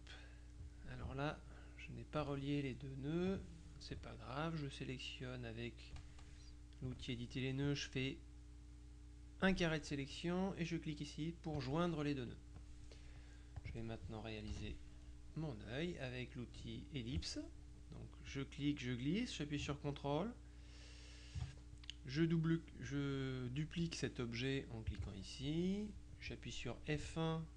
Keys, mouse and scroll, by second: 0.4 middle click, 3.4 click, 6.9 click, 7.7 click, 11.6 click, 12.3 middle click, 13.7 click, 14.6 KP_Subtract, 15.4 middle click, 18.4-21.9 drag, 25.0 click.